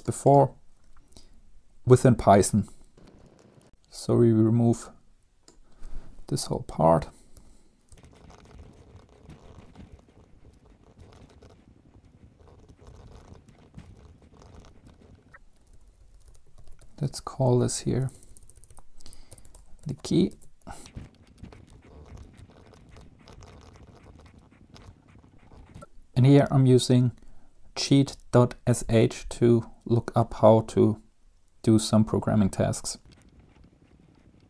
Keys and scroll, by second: 7.3-15.2 typing, 10.7 Right, 10.9 Down, 11.9 Right, 14.1 Up, 14.1 End, 14.1 Down, 14.1 Left, 15.2 Down, 15.2 Page_Up, 15.3 Down, 15.8 Up, 16.0 Up, 16.2 Up, 16.8 Home, 17.0-17.6 Right, 18.2-20.5 typing, 20.5 ctrl+s, 20.9 Down, 21.5 Return, 21.7 Up, 21.7 Left, 21.9-25.8 typing, 25.1 Up.